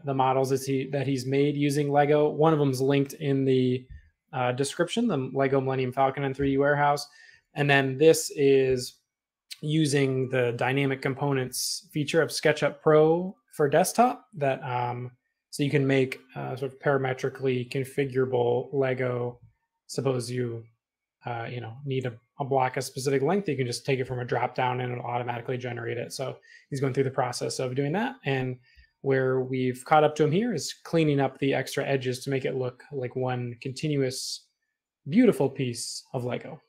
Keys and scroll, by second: 1.6 space, 8.3 e, 18.7 space, 22.5-24.7 typing, 33.2 space.